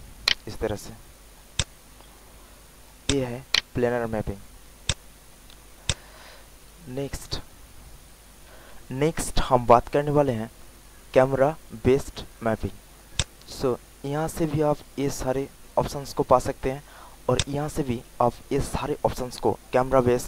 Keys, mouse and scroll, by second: 0.2 alt+right click, 0.8 alt+middle click, 1.5 alt+click, 2.5 alt+middle click, 3.0 alt+click, 3.5 alt+right click, 4.4 alt+middle click, 4.8 alt+click, 5.3 alt+middle click, 5.8 alt+click, 6.6 alt+middle click, 8.5 click.